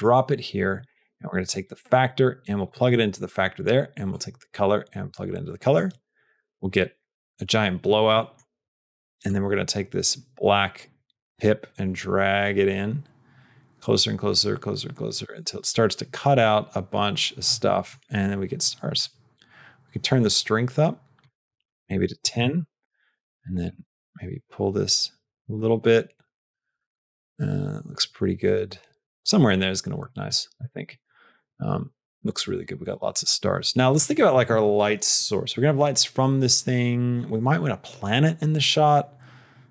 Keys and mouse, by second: 0.2 click, 1.4-2.6 drag, 2.9 middle click, 4.0-6.1 drag, 8.0 middle click, 9.2-17.3 drag, 17.5 middle click, 19.0-21.1 drag, 21.5-22.9 drag, 23.6-29.9 drag.